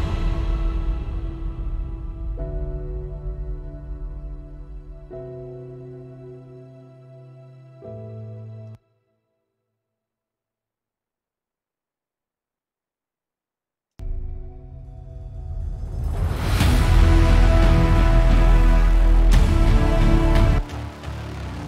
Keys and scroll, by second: 10.2 super+z.